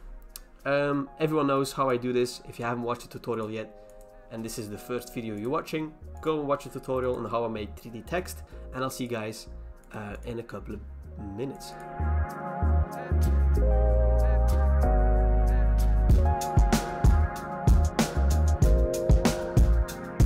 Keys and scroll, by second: 8.4 alt+BackSpace, 8.4 ctrl+d, 12.1 alt+BackSpace, 12.8 alt+BackSpace, 12.9 ctrl+d, 13.2 alt+BackSpace, 13.7 alt+BackSpace, 14.5 alt+BackSpace, 14.5 ctrl+d, 15.3 alt+BackSpace, 15.3 ctrl+d, 15.7 alt+BackSpace, 15.7 ctrl+d, 16.6 alt+BackSpace, 16.6 ctrl+d, 17.1 alt+BackSpace, 18.8 alt+Delete, 18.8 alt+BackSpace, 18.9 ctrl+d, 19.2 alt+BackSpace, 19.4 ctrl+d, 19.8 alt+BackSpace.